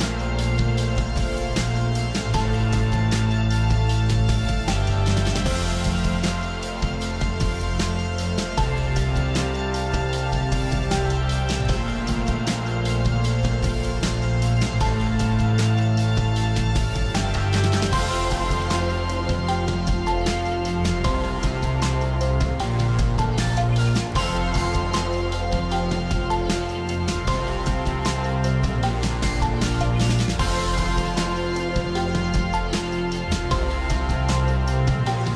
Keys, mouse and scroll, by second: 1.0-2.9 [, 4.1 click, 4.5 click, 4.7 click, 5.0 click, 5.2 click, 5.8 click, 6.1 click, 6.5 click, 7.6 click, 7.9 click, 9.7 click, 10.8 click, 11.1 click, 11.4 click, 12.1 click, 12.8 click, 13.1 click, 13.3 alt+scroll, 14.5 click, 15.7-16.2 alt+scroll, 16.2 click, 20.5 alt+scroll, 21.2 click, 21.3 alt+scroll, 24.1 click, 24.1-25.1 alt+scroll, 26.3 click, 28.3 click, 30.8 click, 33.2 click, 33.4-34.1 scroll down 5.